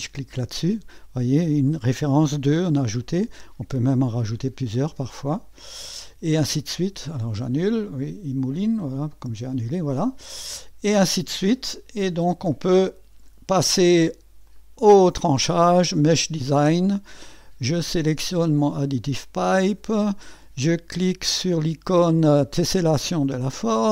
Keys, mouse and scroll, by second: 5.0 click, 10.5-11.8 drag, 12.1 middle click, 14.4 click, 15.9 click, 18.8 click, 23.1 click.